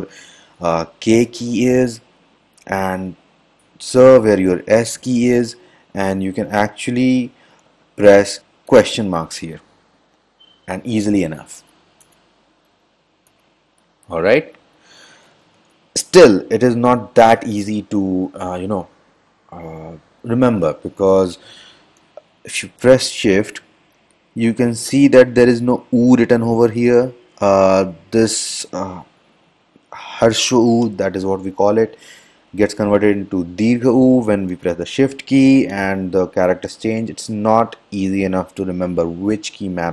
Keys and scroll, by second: 5.7 m, 9.8 f, 11.7 BackSpace, 14.5 f, 15.4 Return, 15.7 Return, 27.3 f, 37.5 f.